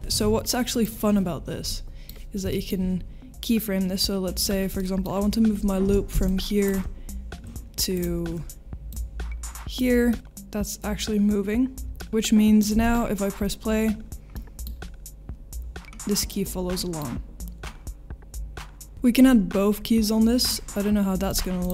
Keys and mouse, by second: 0.3 ctrl+s, 1.6 middle click, 2.5 shift+middle click, 4.3 click, 4.7 middle drag, 5.8 space, 8.0 drag, 8.9 click, 10.1 middle click, 10.2 g, 14.4-14.7 middle drag, 16.8 middle click, 18.9 ctrl+space, 21.3 click, 21.6 click.